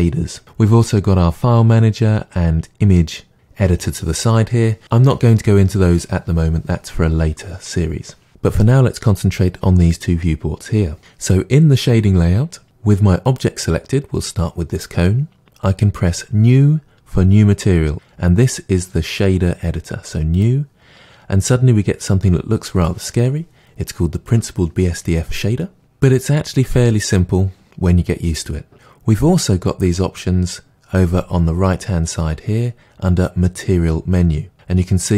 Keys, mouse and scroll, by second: 2.0-2.4 middle drag, 3.2-3.8 middle drag, 13.4 click, 20.4-29.9 drag.